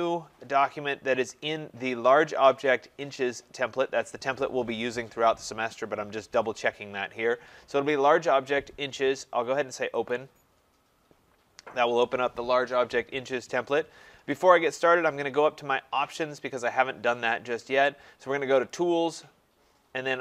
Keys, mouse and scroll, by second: 3.2 click, 10.1 click, 11.2-15.2 drag, 18.7-20.2 drag.